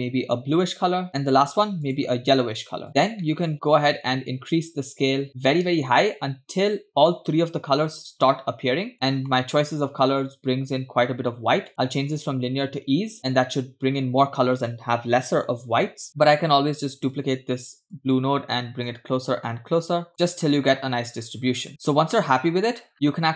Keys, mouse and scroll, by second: 1.1 click, 1.9 click, 2.9 click, 3.2 middle click, 3.9 middle click, 4.9-8.9 shift+drag, 9.3 middle click, 9.7-10.2 scroll up 2, 10.5-11.7 scroll up 2, 11.7 click, 17.1-17.5 ctrl+drag, 17.9-19.0 drag, 19.5-20.1 drag, 20.7-21.2 drag, 21.7 click, 22.6-22.9 scroll down 2.